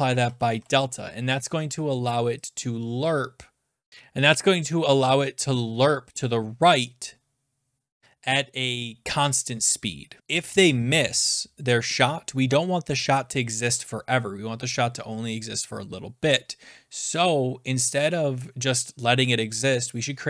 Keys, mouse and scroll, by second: 0.1-1.0 typing, 0.3 click, 3.9 click, 3.9 BackSpace, 8.6 click.